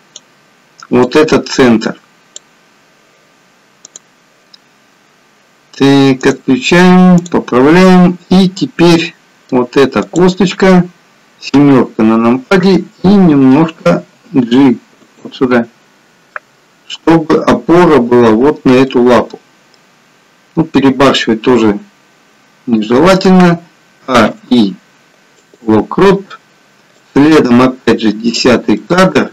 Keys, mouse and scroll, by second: 9.0 middle click, 10.1 click, 11.6 KP_7, 13.9 g, 16.4 middle click, 21.6-22.1 scroll down 1, 24.1 a, 24.4 i, 27.2 click, 28.9 middle click.